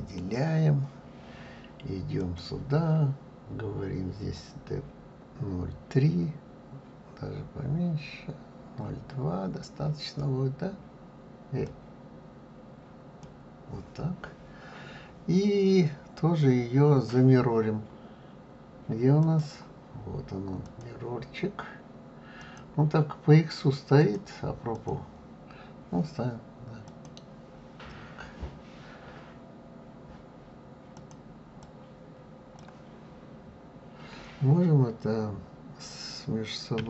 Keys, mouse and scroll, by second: 2.1 click, 4.3-7.4 drag, 11.6-14.6 drag, 19.2-23.6 drag, 24.0 click, 24.7 click, 26.8 click, 30.9 click, 31.6 click.